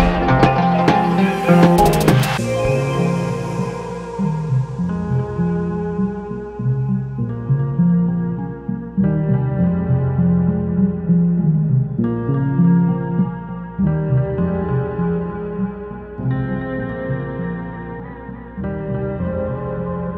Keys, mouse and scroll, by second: 9.4 click, 9.5 click, 13.5 ctrl+c, 13.8 click.